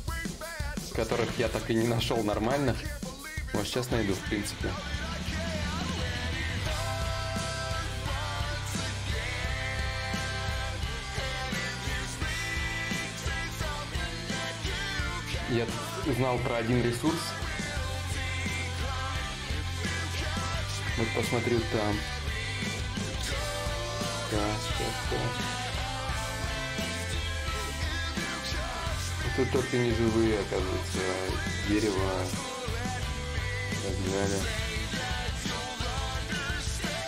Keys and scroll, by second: 1.0 alt+Tab, 6.4 t, 8.2 x, 9.4 t, 10.0 u, 10.4 e, 11.8-13.6 typing, 14.0 Return.